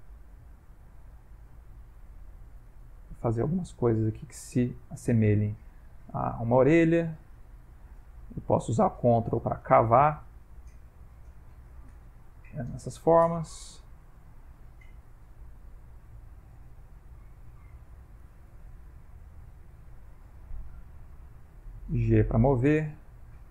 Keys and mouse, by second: 0.0 click, 1.2 ctrl+click, 3.5 click, 5.3 click, 5.9 click, 6.4 click, 7.1 click, 7.5-8.3 ctrl+click, 8.0 ctrl+click, 8.6 click, 9.0 ctrl+click, 9.2 ctrl+click, 9.3 click, 9.6 ctrl+click, 10.0 ctrl+click, 10.4 ctrl+click, 11.3 ctrl+click, 11.8 ctrl+click, 12.2 ctrl+click, 12.6 ctrl+click, 13.4 ctrl+click, 13.8 ctrl+click, 14.4 click, 14.9 click, 15.5 click, 15.9 click, 16.3 ctrl+click, 17.4 click, 17.7 ctrl+click, 17.9 ctrl+click, 18.3 ctrl+click, 18.5 ctrl+click, 19.5 ctrl+click, 19.8 ctrl+click, 20.9 f, 21.5 g, 21.7 click, 23.2 click.